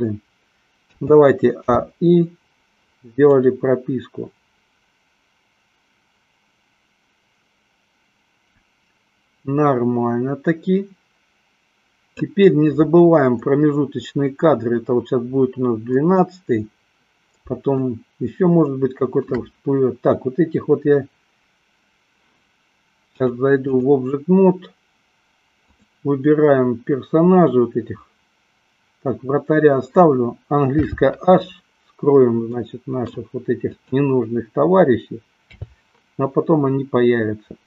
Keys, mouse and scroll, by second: 1.0 a, 1.9 i, 3.8-12.8 drag, 17.9-19.5 shift+middle drag, 23.2-24.2 drag, 25.5 click, 30.8 h, 32.8 middle click, 33.9 click, 35.7 h.